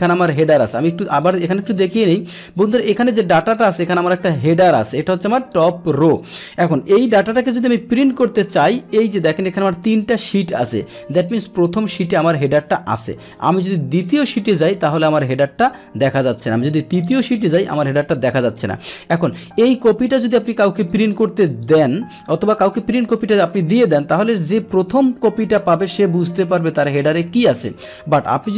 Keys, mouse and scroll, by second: 0.6 Escape, 1.2 click, 2.1-4.7 drag, 5.5 click, 8.2 ctrl+p, 14.1 click, 20.9 click, 21.5 click.